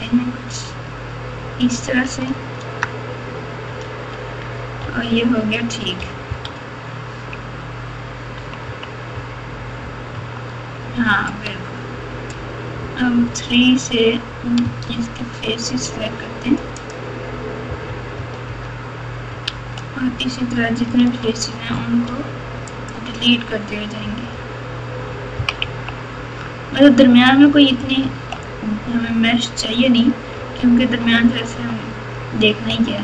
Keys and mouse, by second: 2.5 Tab, 3.8 alt+z, 4.8 KP_8, 6.0 KP_Subtract, 6.2 KP_Subtract, 7.3 KP_2, 8.6 KP_6, 9.1 KP_6, 10.1 KP_4, 14.6 Tab, 14.6 3, 15.9 3, 16.8 click, 17.8 KP_4, 18.1 KP_4, 18.4 KP_4, 19.4 alt+z, 21.0 alt+z, 22.0 x, 24.2 KP_8, 25.3 KP_6, 25.6 KP_2, 27.0 KP_4, 27.8 ctrl+KP_8, 29.0 KP_6, 30.3 ctrl+KP_4, 30.8 ctrl+KP_4, 30.9 ctrl+KP_4, 31.0 ctrl+KP_4, 32.7 KP_3.